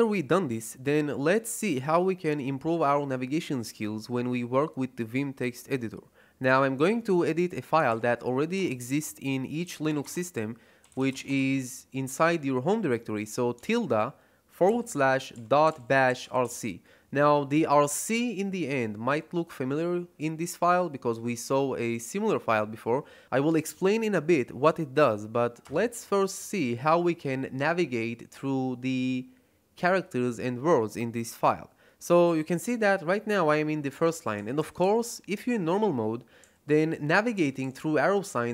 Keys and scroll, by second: 7.8 shift+1, 8.4 BackSpace, 9.5-11.8 typing, 13.4 /, 14.6-16.8 typing, 25.5 Return.